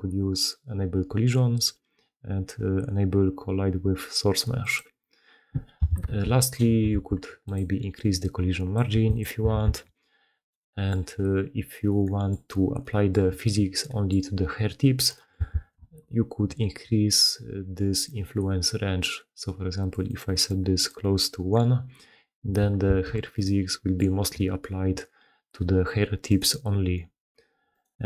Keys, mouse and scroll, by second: 5.9 shift+space, 6.8 shift+space, 9.6 shift+space, 10.5 middle click, 11.5-11.8 middle drag, 14.8 middle click, 15.1 middle click, 15.4 shift+space, 19.7 middle click, 22.4 shift+middle click, 22.8 shift+space, 24.1 middle drag, 24.4 g, 26.3 middle drag, 27.7 click.